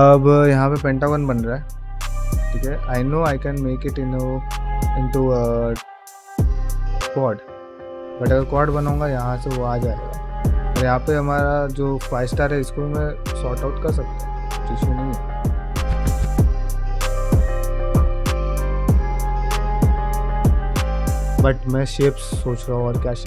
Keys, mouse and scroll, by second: 11.0 middle click, 11.6 shift+middle click, 12.6 click, 13.0 middle click, 13.5 shift+middle click, 13.9-14.9 middle drag, 15.6-19.9 middle drag, 21.5 middle click, 22.4 middle click, 23.0 shift+middle click.